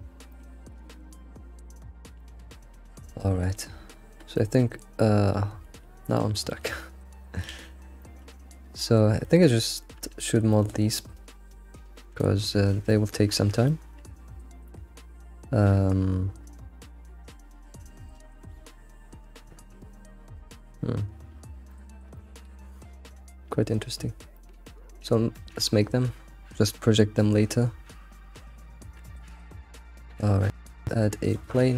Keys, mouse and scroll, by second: 0.3-0.8 shift+middle drag, 0.8 ctrl+s, 1.1-1.8 middle drag, 1.8-2.7 scroll up 5, 2.2 shift+middle drag, 4.4-6.6 shift+middle drag, 6.8 alt+middle click, 7.5 alt+x, 7.8 scroll down 1, 8.0 shift+middle click, 8.5-9.0 scroll up 4, 9.0-10.7 middle drag, 12.4-16.7 middle drag, 21.7-22.2 shift+middle drag, 22.2-22.9 scroll up 3, 22.9-23.5 scroll up 1, 23.8-24.2 scroll down 11, 24.5-24.8 shift+middle drag, 24.9 shift+middle click, 25.9-28.8 scroll down 3, 30.7-31.5 middle drag, 31.5 shift+a.